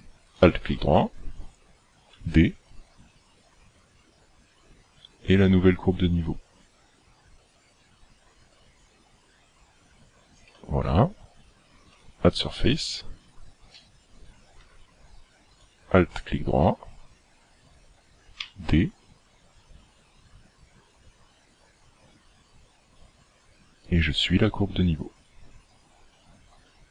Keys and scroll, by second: 2.2 d, 10.5 d, 18.4 d.